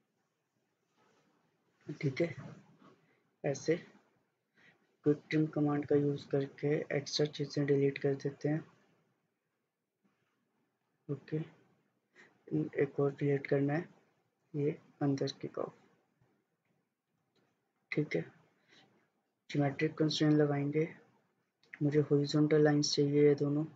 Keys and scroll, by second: 0.4 Escape, 17.7 Escape.